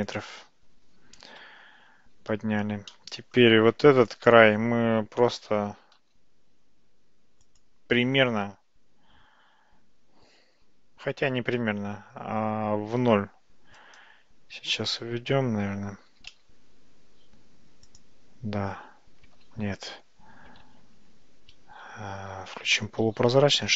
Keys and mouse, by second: 1.4 Tab, 3.0-3.4 middle drag, 3.8 Tab, 4.1 click, 5.7 g, 11.3 g, 16.2 g, 19.5 ctrl+z, 21.0 ctrl+z, 23.0 alt+z.